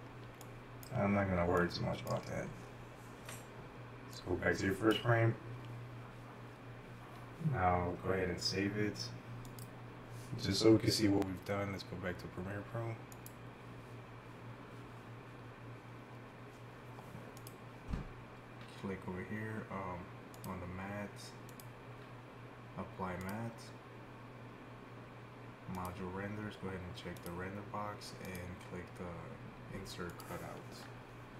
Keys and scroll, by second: 0.3-2.1 typing.